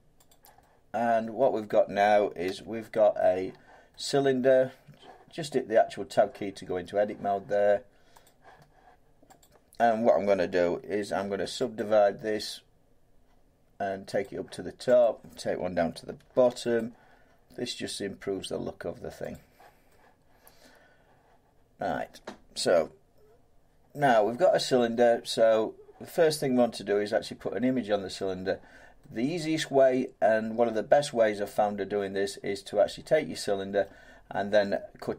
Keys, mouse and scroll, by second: 0.3 click, 1.6 middle click, 2.4 Tab, 4.6 middle click, 8.3 click, 9.4 click, 11.2 ctrl+r, 11.8 click, 14.2 click, 15.6 click, 16.2 ctrl+r, 16.8 click, 19.3 click, 21.9 middle click, 25.5 middle click, 27.0-30.6 middle drag, 30.7-33.6 middle drag.